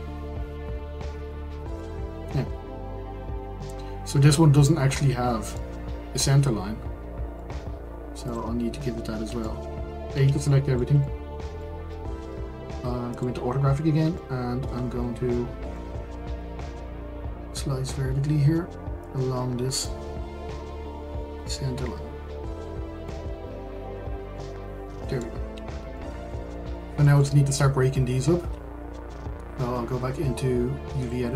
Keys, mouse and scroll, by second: 0.7 scroll down 2, 1.7-8.3 middle drag, 8.3 click, 9.4 middle click, 10.1 a, 10.5-13.2 middle drag, 13.2 click, 13.6-14.1 scroll up 5, 14.2 shift+middle click, 14.8-15.3 scroll up 1, 15.3 shift+middle click, 15.9-19.1 scroll up 1, 19.1 click, 23.7-24.3 scroll down 2, 24.3-26.7 middle drag, 26.7-27.0 scroll up 1, 27.0 shift+middle click, 27.4-30.1 scroll up 1.